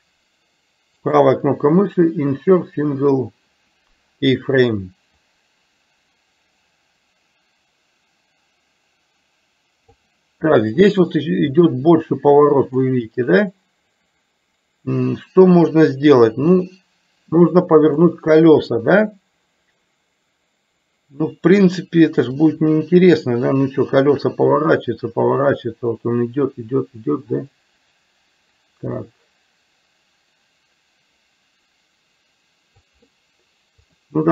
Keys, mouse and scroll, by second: 1.2-2.7 right drag, 5.4-10.2 drag, 16.7-18.0 drag, 22.5-32.9 drag, 33.9 click.